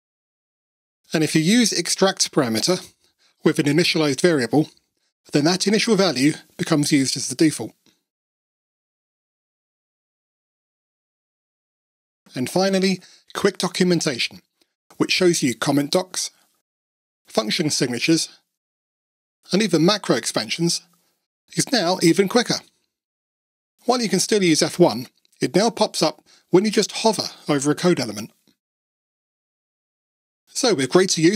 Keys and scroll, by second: 1.4 Tab, 2.2 Tab, 5.2 alt+super+p.